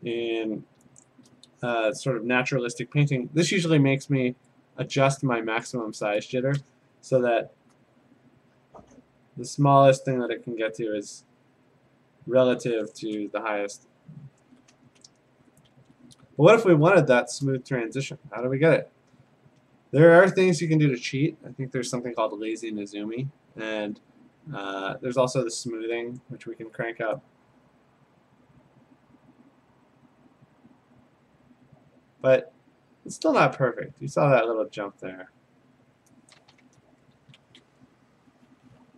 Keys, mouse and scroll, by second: 2.5 F5, 4.6 click, 5.6 click, 8.3 click, 10.2 click, 11.9 click, 13.5 ctrl+scroll, 13.6 ctrl+z, 14.4 ctrl+a, 14.8 BackSpace, 15.3 ctrl+d, 15.7 ctrl+a, 16.2-16.9 ctrl+scroll, 17.5 BackSpace, 18.6 Delete, 19.5 ctrl+d, 20.0 ctrl+scroll, 20.6 alt+Tab, 22.5 alt+Tab, 26.2 click, 35.8 click, 37.2 ctrl+z.